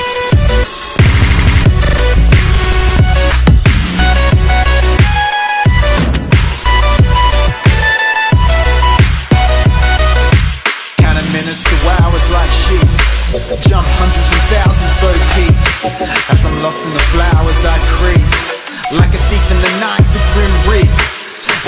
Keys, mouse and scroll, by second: 4.7-6.0 right drag, 7.0 click.